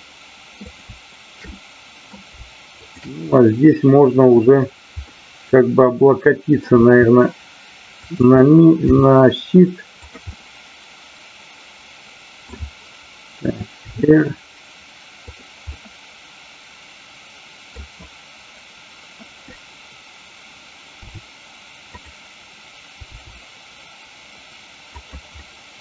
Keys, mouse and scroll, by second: 0.6-1.5 drag, 1.5-2.1 middle drag, 2.8-3.3 shift+drag, 3.3-4.3 middle drag, 5.1-6.5 middle drag, 6.7 r, 8.1 click, 8.8 g, 9.9 click, 10.3-12.5 middle drag, 13.8 r, 15.7-17.8 middle drag, 21.1 r, 21.9 click, 23.1 g, 25.0 click, 25.4-25.8 middle drag.